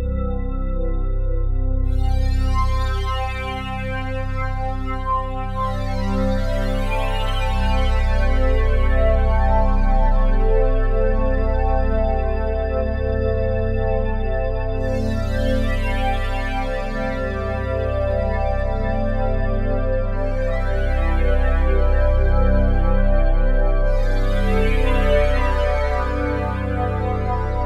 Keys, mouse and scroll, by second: 0.0 click, 1.1 click, 2.3 1, 2.6 Return, 8.7-11.2 drag, 12.1-14.7 alt+drag, 17.1-19.7 drag, 20.4 alt+click, 26.6-27.1 typing, 27.3 Return.